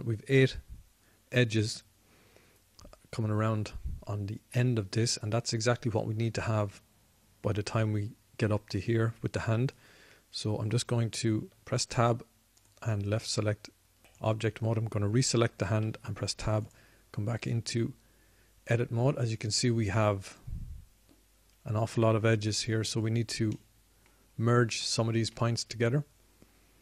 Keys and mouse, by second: 13.2 Tab, 17.6 Tab, 20.1 middle click, 25.4-26.4 middle drag.